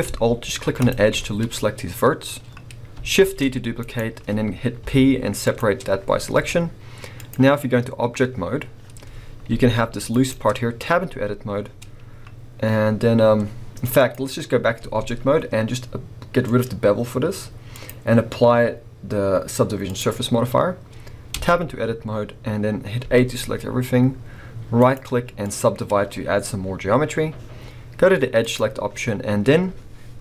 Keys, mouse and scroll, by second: 0.8 alt+shift+click, 3.2 shift+d, 4.8 p, 6.4 Tab, 7.1 click, 9.2 scroll down 1, 9.5 g, 10.3 right click, 10.9 Tab, 13.9 click, 14.8 Tab, 16.4-24.8 drag, 21.4 Tab, 21.8-23.1 scroll up 2, 23.1 a, 24.8 right click, 28.4 click.